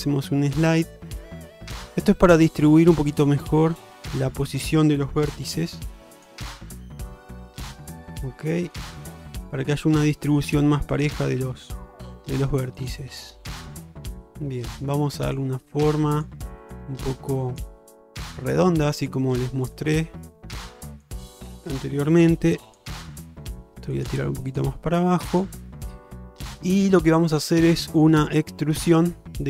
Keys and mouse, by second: 0.8 click, 1.1 g, 3.1 middle click, 4.0 middle click, 4.6 click, 5.4 g, 7.1 g, 8.3 alt+middle click, 9.0 shift+middle click, 10.2 shift+middle click, 11.0 click, 12.1 g, 14.5 click, 15.9 click, 16.7 click, 17.3 click, 19.0 shift+middle click, 22.3 g, 23.2 click, 23.4 g, 24.6 click, 24.8 g, 26.0-27.5 middle drag, 27.8 shift+middle click.